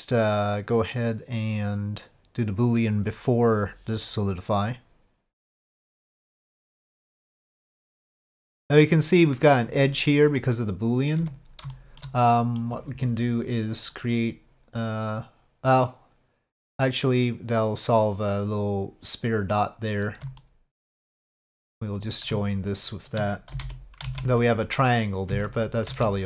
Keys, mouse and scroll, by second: 4.6 click, 6.7 click, 8.1-8.4 middle drag, 10.4-11.1 middle drag, 11.2 Tab, 11.7 shift+middle click, 12.2 middle click, 14.0 click, 16.6-18.4 drag, 19.9 click, 20.4 shift+middle click, 22.0 click, 22.7 shift+click, 23.5 c, 25.3 a, 25.9 alt+a.